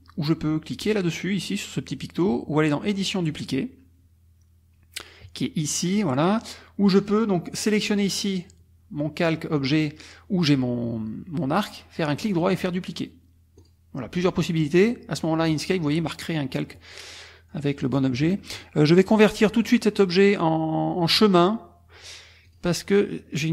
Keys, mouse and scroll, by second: 2.8 click, 6.9 click, 7.6 click, 12.1 click, 13.6 click, 17.1 middle click, 19.6 click, 22.4 click.